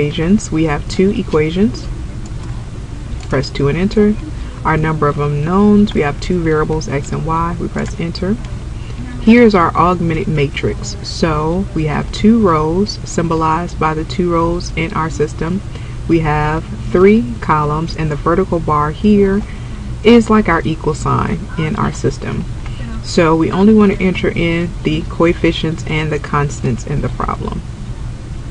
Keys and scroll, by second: 2.4 2, 3.3 Return, 7.9 Return.